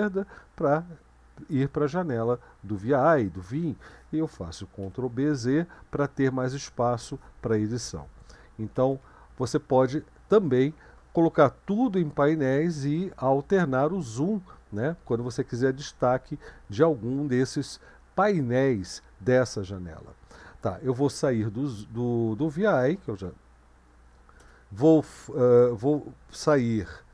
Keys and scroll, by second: 4.8 ctrl+b, 5.3 z, 8.8 ctrl+b, 9.0 z, 23.0-23.7 typing, 24.4 Return.